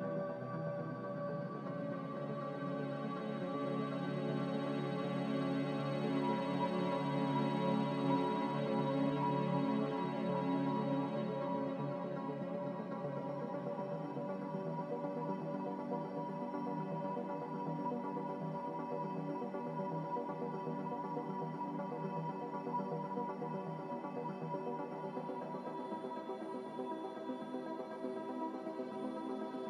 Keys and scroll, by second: 1.9 ctrl+z, 5.4 Return, 5.4 5, 8.0 ctrl+z, 11.2-11.9 typing, 21.8-22.8 typing, 25.5 ctrl+z, 27.1 Return.